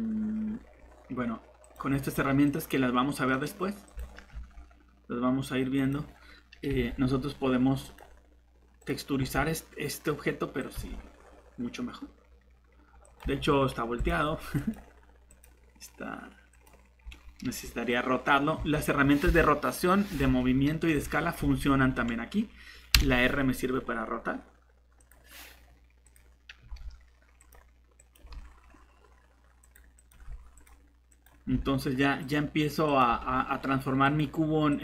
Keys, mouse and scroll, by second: 4.3 a, 6.7 g, 9.2 g, 10.7 g, 14.5 typing, 17.0-17.4 typing, 18.5 Escape, 20.9 g, 21.4 Escape, 22.9 r, 26.6 g, 28.2 g, 30.1 g, 31.4 g, 33.1 g.